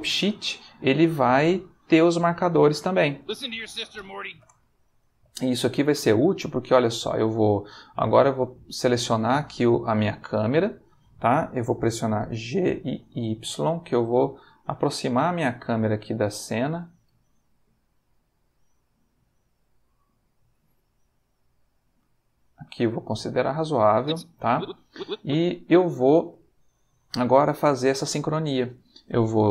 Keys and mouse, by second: 3.2 space, 4.4 space, 8.3 click, 9.8 ctrl+middle click, 12.4 g, 13.0 y, 16.5 click, 17.0 g, 18.9 click, 22.2-23.5 ctrl+middle drag, 23.8-25.5 drag, 25.9 ctrl+middle click, 26.5-28.2 ctrl+shift+middle drag.